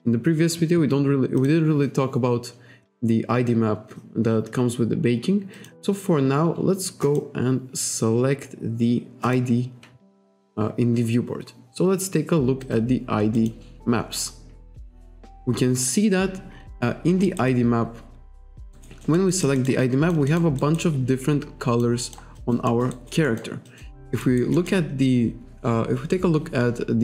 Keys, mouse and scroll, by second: 1.4 click, 5.6 click, 7.1 click, 8.0-8.8 scroll down 1, 9.3 click, 12.7 click, 13.4 click, 15.6-15.9 scroll up 1, 15.9-16.3 scroll down 1, 16.3-16.7 scroll up 1, 17.3 alt+right click, 17.5 alt+click, 18.8 alt+right click, 19.1 alt+middle click, 19.9 alt+click, 20.3 alt+middle click, 20.6 alt+right click, 20.9 alt+click, 22.1 alt+middle click, 22.4 alt+click, 22.7 alt+middle click, 23.0 alt+right click, 23.3 alt+middle click, 23.7 alt+click, 24.0 alt+middle click, 24.3 alt+right click, 24.6 alt+middle click.